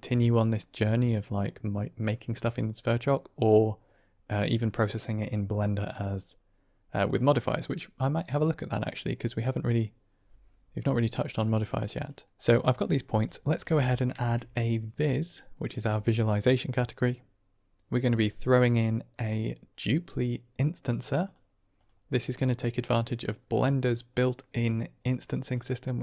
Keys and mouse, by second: 11.3-12.3 middle drag, 12.7 middle click, 13.2 click, 13.5 g, 14.4 shift+a, 22.5-25.4 drag.